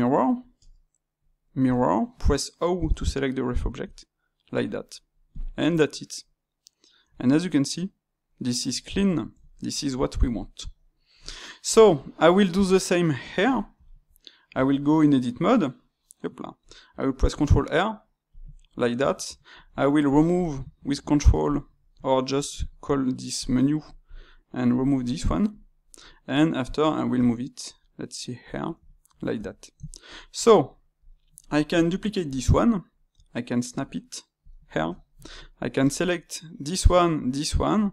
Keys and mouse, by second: 0.5 space, 3.8-4.6 drag, 4.6-5.3 middle drag, 5.6-12.6 middle drag, 12.6 click, 13.1-14.5 middle drag, 14.5 Tab, 17.2 ctrl+r, 19.0 shift+q, 21.5 shift+q, 26.0-27.1 middle drag, 27.1 g, 28.7 ctrl+middle click, 29.3 Tab, 29.8-30.9 shift+middle drag, 30.9 click, 32.2 shift+d, 34.6-35.7 shift+middle drag, 35.7 shift+click.